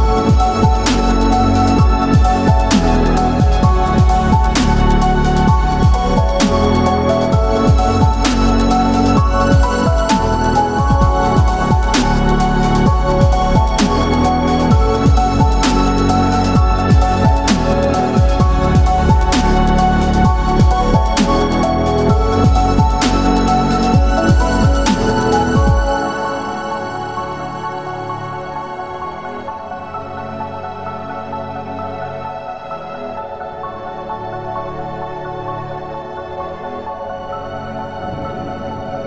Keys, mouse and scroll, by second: 0.6 middle click, 2.1 click, 2.6 alt+click, 4.3 f, 5.3 i, 6.4 click, 6.7 i, 7.4 click, 7.6 i, 8.2 click, 8.4 i, 9.5 click, 10.8 m, 12.2-12.5 scroll down 2, 12.5-14.2 middle drag, 15.0 KP_1, 15.6-16.0 scroll up 2, 16.1 shift+middle click, 18.0 ctrl+r, 25.3 click, 25.7 ctrl+r, 29.3 click, 30.5 ctrl+r, 33.8 click, 34.6 ctrl+r, 38.8 click.